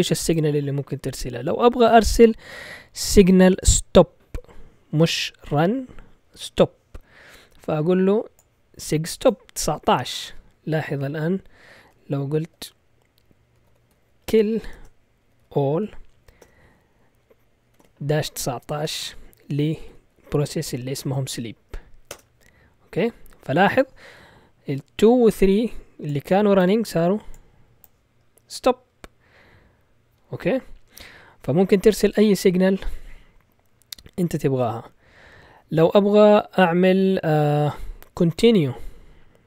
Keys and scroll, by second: 13.4-22.6 typing.